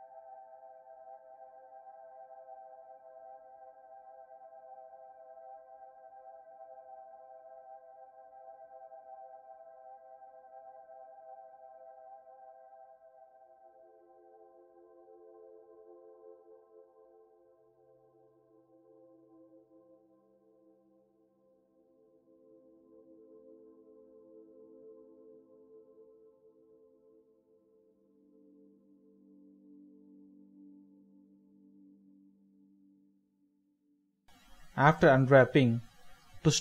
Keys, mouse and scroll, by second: 0.3-0.7 scroll up 1, 0.8 shift+middle click, 1.2-2.4 scroll down 1, 2.4 right click, 3.8 shift+middle click, 4.8 shift+middle click, 5.0 scroll up 1, 5.2-5.7 shift+scroll down 1, 6.0 scroll down 1, 6.3 shift+middle click, 7.8-8.2 scroll up 1, 8.2 shift+middle click, 8.6 scroll up 1, 8.8-9.3 scroll down 1, 10.6-11.4 scroll up 1, 11.5 shift+middle click, 11.8 scroll down 1, 13.1-14.2 scroll down 1, 16.0 middle click, 24.1 scroll down 1, 24.3 middle click, 25.4 typing, 26.8 typing, 29.5 alt+z, 36.4 a.